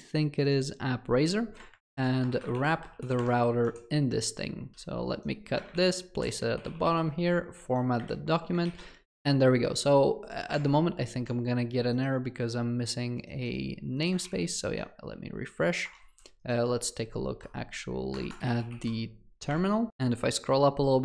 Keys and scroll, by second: 2.7 ctrl+v, 4.7 ctrl+x, 5.7 ctrl+v, 6.6 ctrl+alt+l.